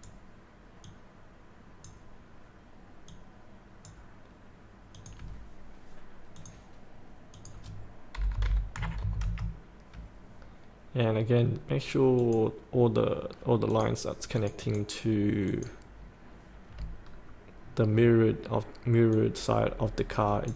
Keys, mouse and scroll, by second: 8.1 KP_8, 8.7 KP_Decimal, 8.9 KP_5, 12.2 click, 17.0 scroll up 1, 17.6 scroll down 1, 19.1 click, 19.4-20.5 drag.